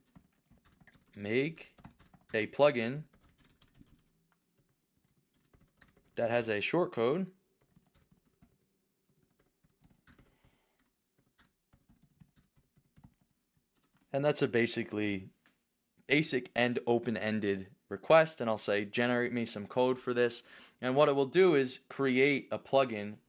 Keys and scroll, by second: 1.7 BackSpace, 10.8 BackSpace, 13.7 super+Return.